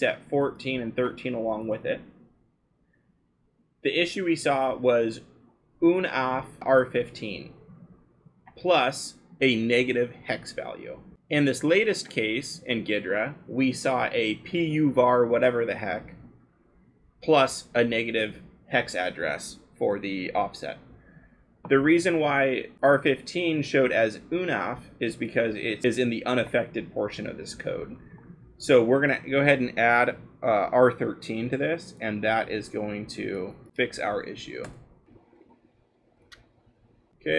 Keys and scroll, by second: 25.8-26.2 scroll, 33.4 ctrl+c, 33.7 Return, 34.1 space, 35.2 BackSpace, 35.4 ctrl+v, 36.6 BackSpace, 36.7 3.